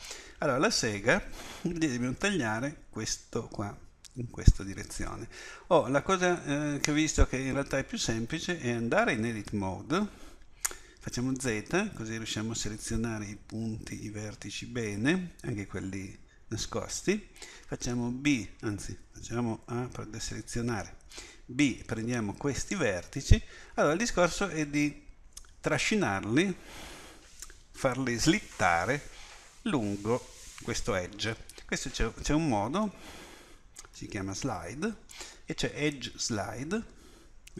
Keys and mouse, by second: 9.2 Tab, 11.4 z, 17.6 b, 19.7 a, 22.9 b, 32.9 space.